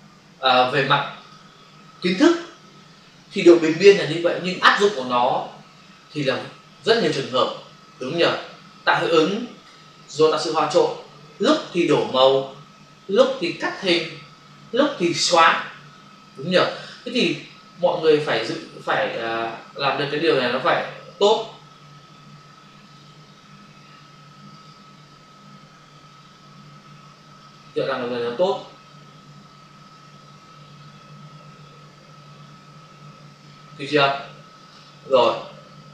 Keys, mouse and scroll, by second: 1.1 click, 20.7 click, 22.9 click, 24.5 click, 27.4 click, 35.1 right click.